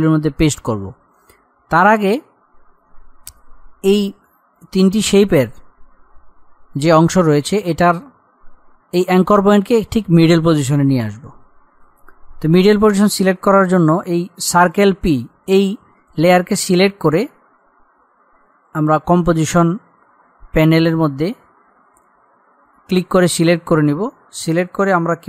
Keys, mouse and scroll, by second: 1.6-2.0 scroll up 1, 4.7 click, 12.9 click, 19.5 click.